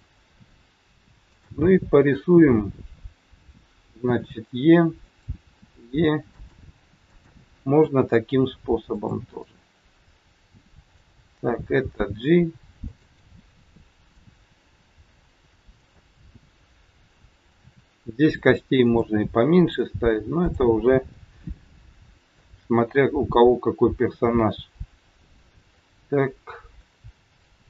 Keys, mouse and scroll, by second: 1.2 click, 4.0 e, 5.4 e, 7.1 click, 7.7 e, 9.3 middle click, 11.8 g, 13.2 middle click, 13.2-13.8 scroll up 1, 14.8 g, 16.1-16.4 scroll down 2, 17.7 e, 19.2 middle click, 20.3 click, 21.2 middle click, 23.4 e, 25.8 middle click, 27.5 e.